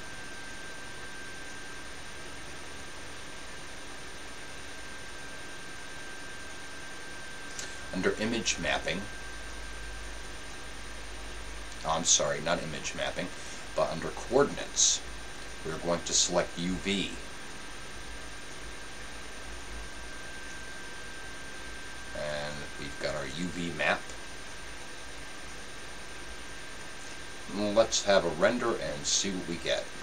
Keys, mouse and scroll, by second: 28.5-30.0 drag.